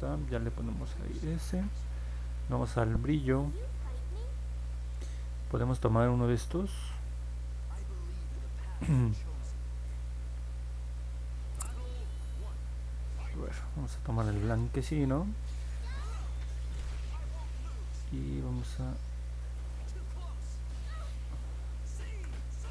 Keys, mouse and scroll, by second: 20.5-21.6 drag, 22.0 ctrl+z.